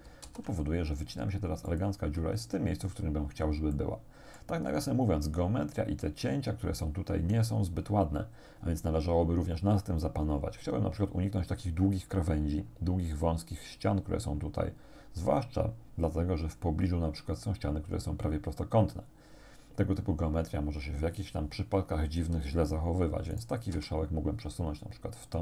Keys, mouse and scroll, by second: 0.3 alt+shift+s, 1.7 click, 2.2-2.6 scroll down 1, 3.8 shift+click, 4.8-5.2 shift+scroll down 1, 23.4 right click, 23.8 g, 25.3 click.